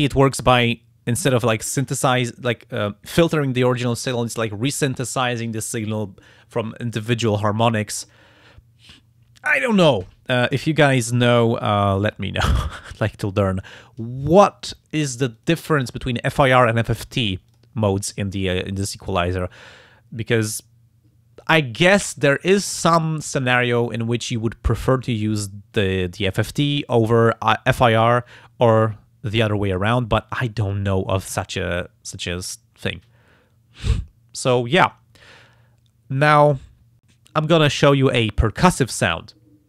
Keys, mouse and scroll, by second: 0.0 click, 0.5 click, 15.4 click, 17.5 click, 26.7 click, 29.7 click, 36.5 click, 37.7 click.